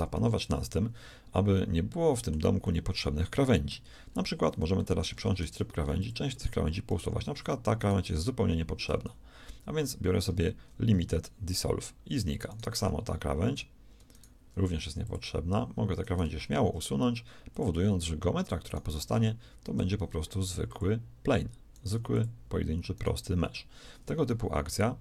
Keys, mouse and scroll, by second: 5.3 ctrl+Tab, 10.2 x, 14.5 x, 16.8 shift+x, 19.9 x, 21.9 x, 23.3 x.